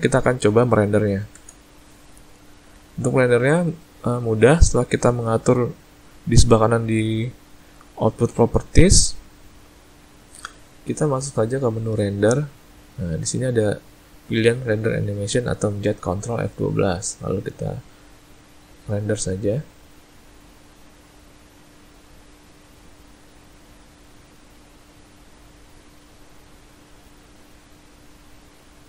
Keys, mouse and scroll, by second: 1.4 space, 12.6 click.